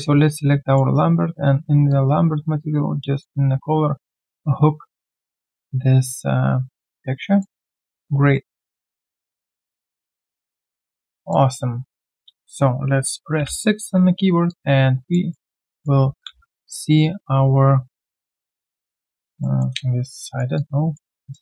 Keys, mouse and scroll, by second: 10.6 alt+right click, 11.2 alt+click, 14.5 alt+click, 15.3 alt+middle click, 15.6 alt+click, 19.4 typing, 19.4 alt+middle click, 20.2 alt+right click, 20.5 alt+click, 21.1 alt+right click.